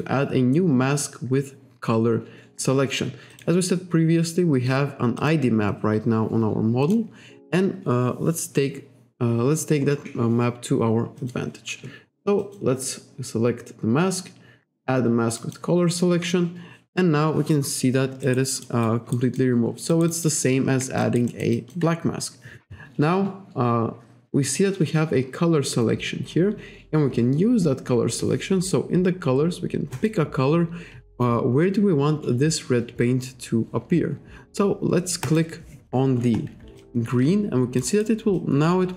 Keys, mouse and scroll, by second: 3.4 click, 4.2-4.7 scroll down 1, 5.3 click, 6.9 click, 9.6-10.0 scroll up 1, 11.2 click, 12.5 click, 15.4 click, 17.1-17.5 scroll down 1, 18.3 alt+right click, 18.9 alt+right click, 19.4 alt+click, 20.2 alt+click, 21.1 alt+right click, 21.8 alt+click, 30.0 click, 35.3 click, 36.9 alt+click, 38.0 alt+right click, 38.4 alt+click.